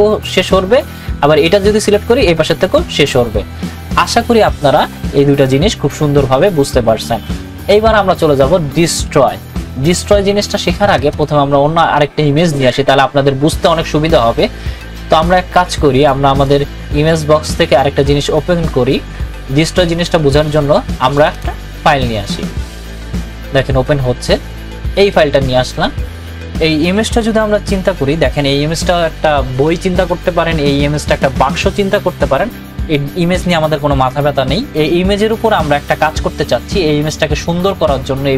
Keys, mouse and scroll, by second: 11.1 click, 13.2 click, 15.1 click, 21.1 click, 21.2 click.